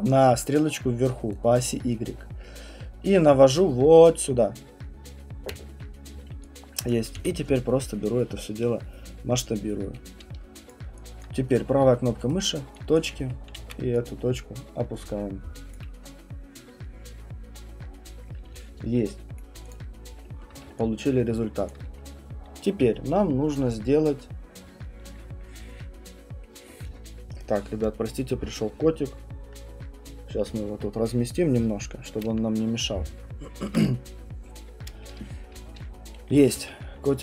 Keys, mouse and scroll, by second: 5.5 click, 6.9 alt+click, 7.2 r, 10.7 click, 11.2 alt+click, 12.3 right click, 12.9 click, 13.6 w, 15.7 click, 17.9 middle click, 17.9 middle click, 19.4 right click, 19.7 click, 20.4 alt+middle click, 21.7 alt+click.